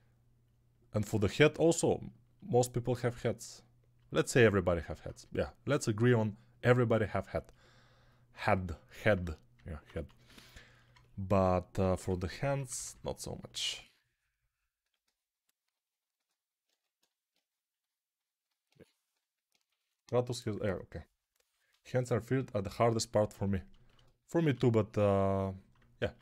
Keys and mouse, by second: 9.8 1, 11.8 1, 12.4 [, 12.6 [, 12.8 [, 16.5 2, 18.3-24.9 alt+drag, 18.3-24.9 alt+middle drag, 18.3-24.9 alt+right drag, 24.4 1, 25.9 alt+q.